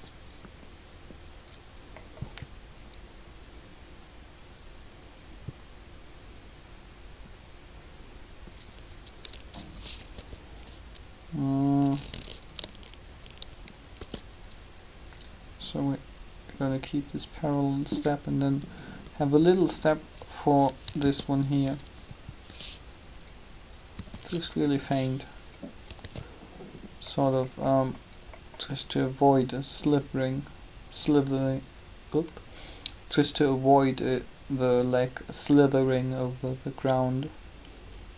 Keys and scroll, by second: 10.1 shift+g, 13.7 shift+d, 21.0 shift+d, 23.9 r, 26.0 alt+a.